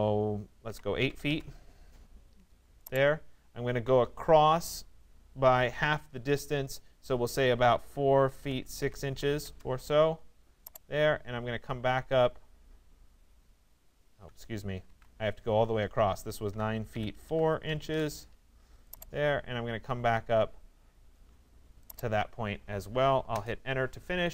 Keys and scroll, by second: 0.3 8, 1.3 Return, 9.4 Return, 14.4 ctrl+z, 16.5 9, 17.3 4, 17.9 Return, 22.9 Return.